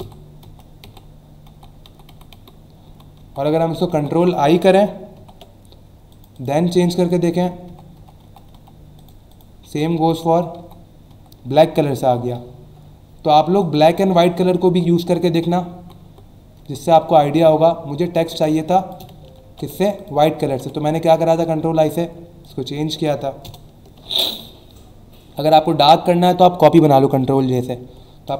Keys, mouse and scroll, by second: 6.1 click, 7.0 click, 9.0 click, 9.3 click, 12.1-12.5 scroll up 2, 13.6 click, 14.3 click, 17.4 click, 17.8 alt+scroll up 1, 18.4 space, 18.9 space, 19.9 click, 20.1 click, 21.3 click, 22.4 alt+shift+click, 23.6 Return, 23.9 ctrl+0, 27.1 ctrl+j.